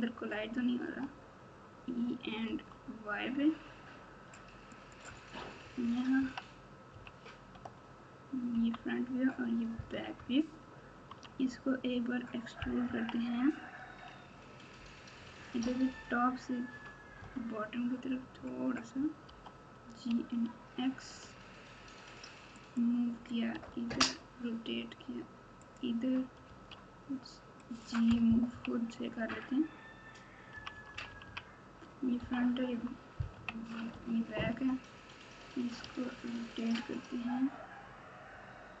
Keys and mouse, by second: 0.8 e, 5.6 KP_6, 5.8 KP_6, 6.9 KP_1, 8.5 KP_9, 10.1 ctrl+KP_6, 10.7 ctrl+KP_6, 12.8 KP_3, 15.6 KP_7, 17.1 KP_9, 19.2 g, 23.6 r, 26.4 g, 28.5 KP_1, 29.3 KP_3, 30.5-32.2 typing, 33.3 KP_1, 33.9 KP_9, 35.8 r.